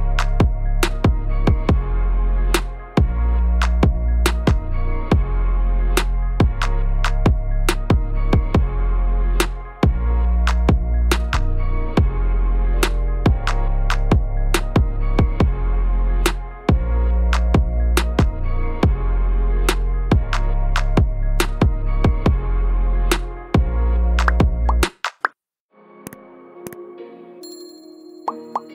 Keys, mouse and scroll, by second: 0.9 click, 1.1 Tab, 1.2 click, 1.5 shift+s, 2.1 Tab, 2.2 click, 2.6 shift+s, 3.0 middle click, 3.8 click, 4.3 click, 4.4 Tab, 5.4 click, 5.8 shift+s, 6.4 Tab, 6.5 click, 7.0 shift+s, 7.4 middle click, 7.9 click, 8.0 click, 8.5 Tab, 8.5 click, 8.8 shift+s, 9.3 middle click, 9.6 scroll up 2, 9.7 Tab, 9.9 click, 10.3 shift+s, 10.8 middle click, 11.1-11.6 scroll down 2, 11.7 click, 11.8 Tab, 11.9 click, 12.2 shift+s, 12.7 Tab, 13.3 click, 14.0 shift+s, 14.7 middle click, 15.4 r, 16.7 click, 17.0 Tab, 17.0 click, 17.3 shift+s, 18.2 Tab, 18.3 click, 18.6 shift+s, 19.0 middle click, 19.3 scroll down 2, 19.3 middle click, 19.6 scroll up 2, 19.8 middle click, 20.3 click, 20.5 click, 20.6 shift+click, 20.9 shift+click, 21.0-21.4 scroll down 1, 21.4 KP_7, 21.9 shift+middle click, 22.4 shift+d, 24.4 scroll down 2, 24.5 middle click, 24.7 scroll up 4, 24.9 middle click, 25.2 middle click, 26.0 click, 26.2 Tab, 26.4 click, 26.8 shift+s, 27.2 Tab, 27.4 click, 27.6 shift+s, 28.1 click, 28.2 Tab, 28.3 click, 28.6 shift+s.